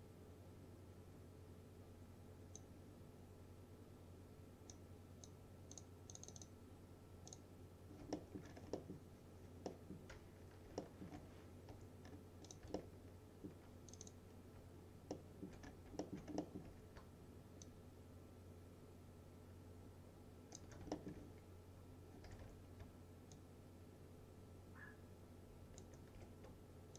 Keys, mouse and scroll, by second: 5.1-5.4 click, 8.2 alt+middle click, 8.5 scroll down 2, 8.8-10.7 middle drag, 10.9 alt+middle click, 11.4-11.8 scroll up 2, 11.8 2, 12.1-12.5 scroll up 2, 12.5 click, 12.8-13.8 alt+middle click, 14.0 click, 15.2-15.8 alt+middle click, 15.7 scroll down 1, 16.1 alt+middle click, 16.7 w, 17.7-20.8 shift+drag, 21.0 alt+middle click, 22.1-23.0 typing, 23.4-25.9 shift+drag, 26.2 w.